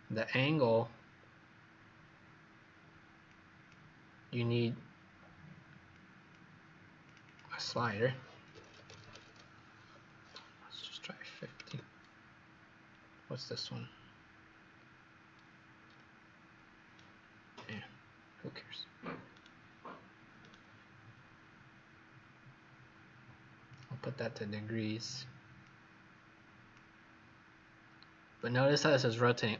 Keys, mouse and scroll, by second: 7.2 click, 10.7 KP_5, 11.2 KP_0, 12.9-13.9 scroll down 2, 13.9-15.8 scroll up 1, 15.8-16.8 scroll up 1, 16.8 right click, 23.6 click.